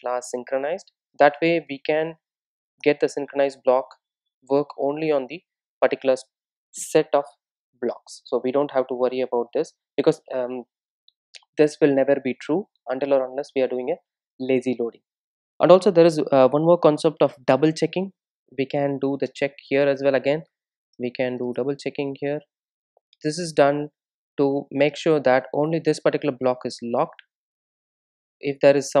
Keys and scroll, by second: 20.6 Return, 27.3 alt+super+l, 27.5 alt+super+l.